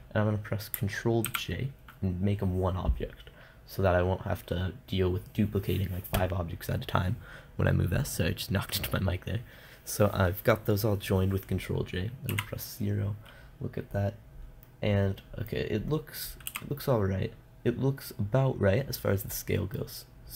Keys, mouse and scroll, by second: 1.7 ctrl+j, 12.8 KP_0, 15.1-16.9 middle drag, 16.9 KP_0, 20.2 middle click.